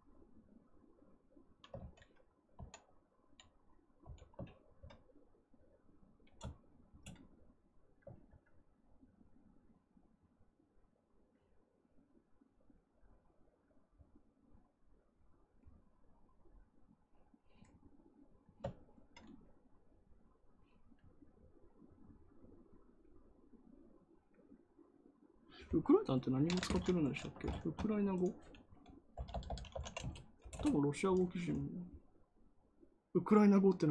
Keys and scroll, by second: 2.4 x, 3.9 x, 29.0-30.2 typing, 30.3 Return.